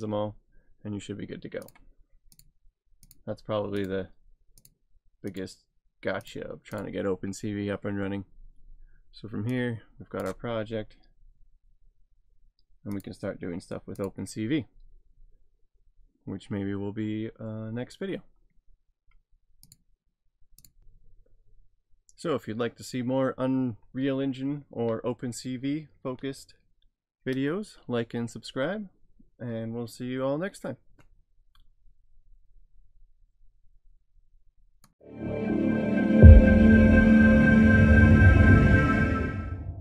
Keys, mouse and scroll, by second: 1.7 click, 6.7 double click, 9.6 click, 13.0 click, 19.7 click.